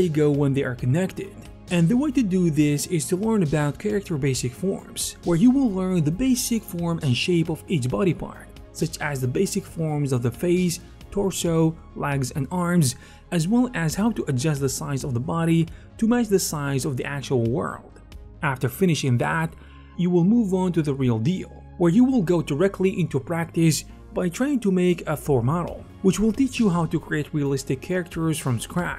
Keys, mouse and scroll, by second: 0.1 ctrl+shift+d, 0.1 f, 0.2-4.9 drag, 0.2-4.7 middle drag, 2.9 ctrl+shift+c, 2.9 f, 2.9 d, 7.1-9.1 drag, 9.1 middle click, 9.1 f, 9.2-13.2 drag, 9.2 f, 10.6-12.0 ctrl+alt+shift+right drag, 11.7 ctrl+f, 14.6-16.4 middle drag, 15.6 click, 16.2 ctrl+Tab, 16.4 click, 17.1 middle click, 17.1 f, 17.3 click, 18.4-22.1 middle drag, 19.3 0, 19.5 f, 19.8 click, 20.6 shift+click, 21.1 click, 21.7 click, 22.9 middle click, 23.0 click, 23.7 middle click, 24.2 click, 24.3 alt+shift+middle click, 25.0 click, 25.2-28.9 middle drag.